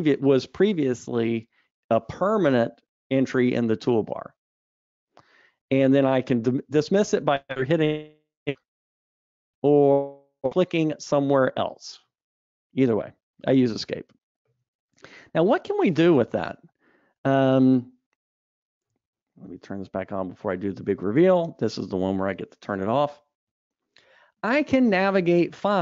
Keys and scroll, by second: 12.8 super+Up, 20.4 super+1.